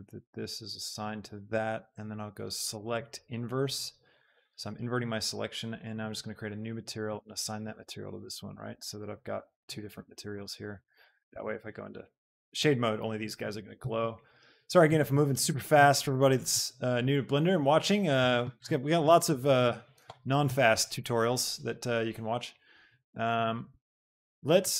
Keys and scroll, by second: 11.4 Tab, 17.5 KP_7, 19.5 shift+d, 19.9 Escape, 20.6 g.